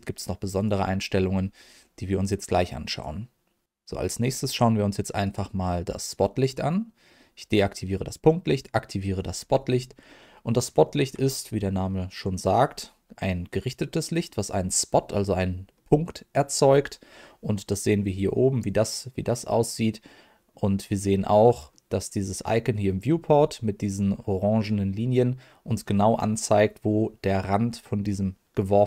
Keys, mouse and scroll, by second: 0.5 click, 2.9 click, 5.2 click, 6.0 click, 8.5 click, 9.7-10.0 scroll down 1, 10.0 middle click, 10.8 shift+middle click, 11.2 scroll down 1, 11.5 middle click, 15.7 middle click, 16.6-18.3 scroll up 1, 18.3 middle click, 20.9 click, 21.7 middle click, 25.9 middle click.